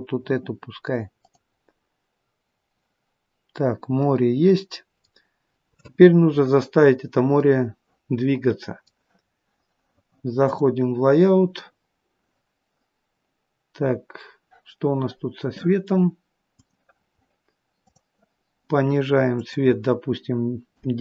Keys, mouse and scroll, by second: 10.8 click, 11.9-12.3 scroll up 2.